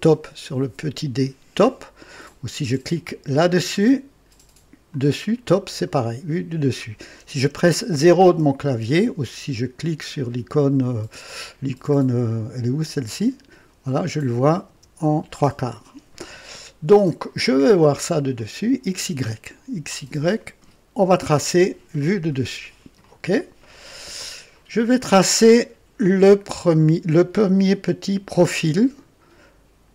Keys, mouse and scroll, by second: 0.0-1.0 drag, 4.8 click, 13.0 click, 14.6 KP_0, 18.3 click, 22.9 click, 24.4-24.8 scroll down 2.